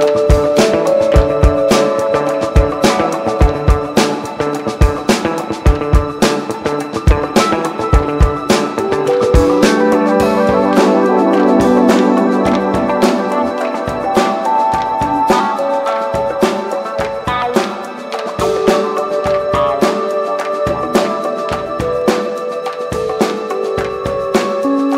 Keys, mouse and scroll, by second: 0.7 click, 4.3-6.4 drag, 6.8 t, 9.1 click, 9.8-10.6 typing, 13.1-21.5 drag, 22.0 ctrl+d, 24.4-24.9 drag.